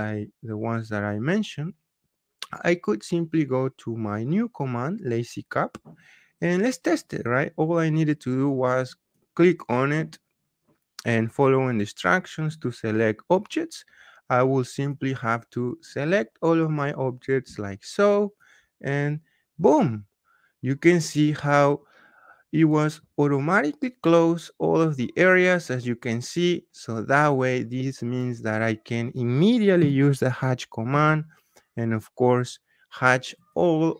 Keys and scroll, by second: 29.7 h, 30.8 Return.